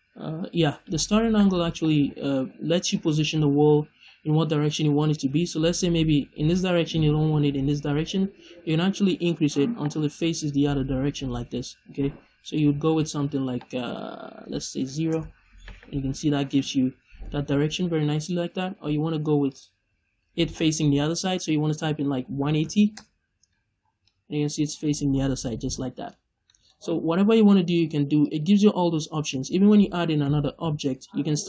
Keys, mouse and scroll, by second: 0.8 right click, 8.6-12.4 drag, 12.4 right click, 12.8-16.4 drag, 15.0 Return, 16.2 scroll down 1, 16.4-17.2 middle drag, 17.2-17.9 scroll up 2, 17.9-18.3 middle drag, 19.4-23.9 drag, 22.9 Return, 23.7 scroll down 1, 23.9 middle click, 25.0 scroll up 1, 25.3 middle click, 28.1 click, 29.2 middle click, 30.5 shift+a.